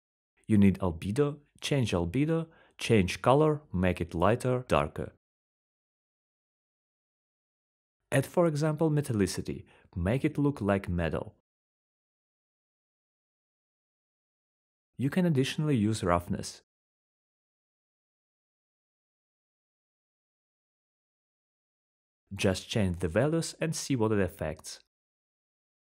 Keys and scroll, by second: 5.7-7.0 typing, 13.8-15.3 typing.